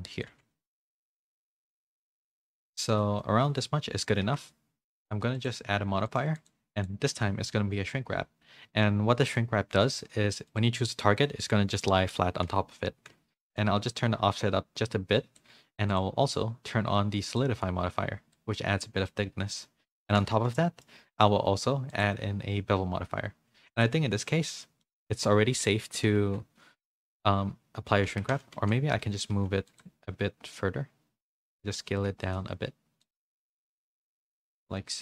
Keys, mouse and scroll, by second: 0.3 r, 0.9 middle click, 1.5 shift+middle click, 1.8 middle click, 2.8 middle click, 3.2 middle click, 3.4-4.0 scroll down 1, 4.0 scroll up 1, 4.1 scroll down 1, 4.2 Tab, 5.3 click, 6.1 click, 6.8-9.3 drag, 10.4 click, 11.2 middle click, 13.5-15.4 shift+drag, 16.0-17.3 drag, 18.4-20.0 shift+drag, 20.2 a, 20.5 middle click, 20.5 a, 21.1 click, 21.9-22.9 drag, 23.7 click, 24.8 middle click, 26.0 KP_Decimal, 26.1 KP_3, 28.1 Tab, 28.6 z, 29.0 a, 29.3 r, 29.8 g, 31.5 s, 32.4 r, 33.3 middle click, 33.9 z, 34.3 middle click, 34.9 s.